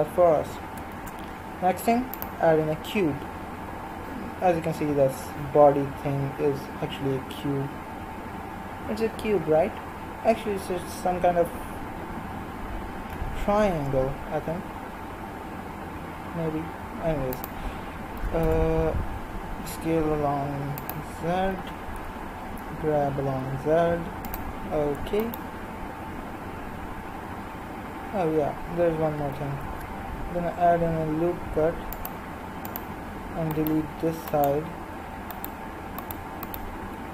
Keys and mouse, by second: 0.9 shift+a, 12.2 g, 18.2 s, 21.5 g, 25.2-29.6 right drag, 29.6 ctrl+r, 33.5-37.1 right drag.